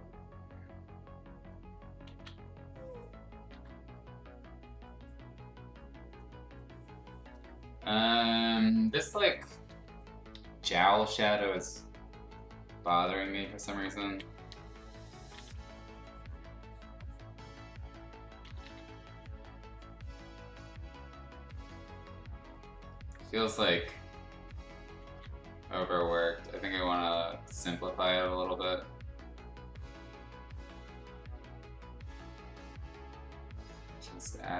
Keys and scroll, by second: 2.1 ctrl+z, 3.5 ctrl+z, 11.3 ], 11.6 ], 12.7 ], 13.8 ], 14.4 ], 15.3 ctrl+z, 18.4 ctrl+z, 18.6 ctrl+z, 25.0 ctrl+z, 32.0 x.